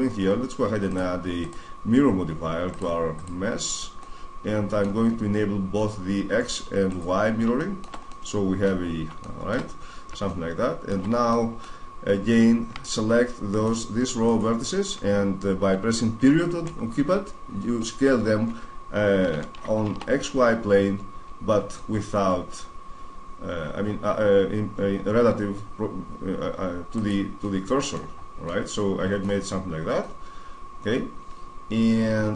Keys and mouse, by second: 0.7-3.2 drag, 3.7-5.0 middle drag, 6.7-8.0 drag, 8.0-9.0 middle drag, 9.4-13.3 middle drag, 13.3-15.9 right drag, 16.3 ., 19.1 s, 26.8-28.7 drag, 28.7-31.7 middle drag.